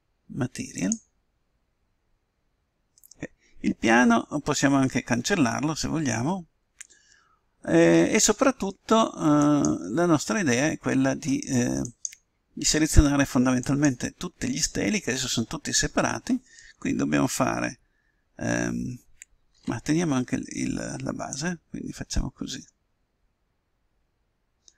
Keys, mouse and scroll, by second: 11.2 right click, 13.6-16.3 right drag, 19.4 a, 20.5 b.